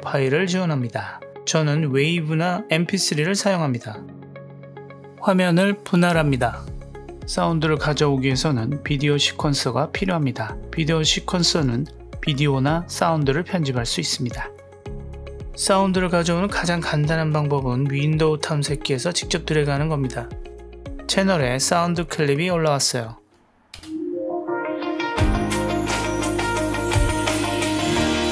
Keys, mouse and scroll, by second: 5.0-6.7 drag, 8.9-12.6 drag, 23.8 space.